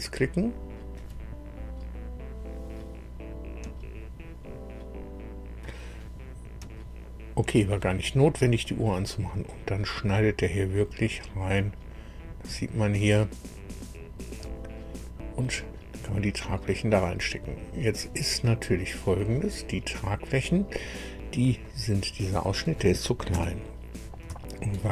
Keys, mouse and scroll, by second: 8.6-14.6 drag, 15.0-15.4 scroll up 1, 15.6-18.1 drag, 18.7 scroll up 1, 19.5 scroll up 1, 20.4-20.8 scroll down 1, 21.6 click, 23.3 KP_1, 24.6 shift+click.